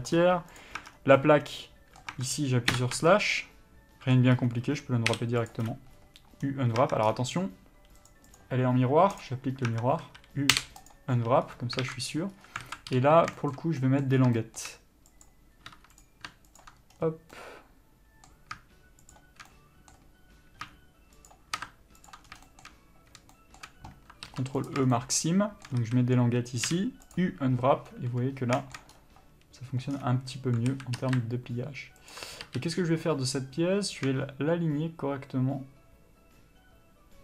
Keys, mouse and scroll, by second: 0.4 scroll up 1, 0.8 click, 1.0 Tab, 1.2 scroll down 1, 1.4 middle click, 2.4 Tab, 3.0 KP_Divide, 3.2 Tab, 3.6 middle click, 4.6-5.4 scroll up 1, 5.8 u, 7.1 Tab, 7.3-8.5 scroll down 1, 9.5 click, 9.9 Tab, 11.2 u, 12.1 alt+a, 12.6-12.9 scroll up 1, 12.9 alt+a, 13.6 shift+middle click, 14.0 middle click, 14.4 scroll up 1, 14.6 shift+middle click, 15.4 click, 15.9 2, 16.2 click, 16.8 ctrl+click, 17.2-17.6 scroll down 1, 17.6 middle click, 19.4 shift+click, 19.7 middle click, 21.5 shift+click, 22.3 ctrl+click, 22.5 scroll down 1, 22.7 shift+middle click, 24.9 ctrl+e, 25.2 shift+middle click, 26.0 a, 27.4 u, 30.9 a, 31.2 r.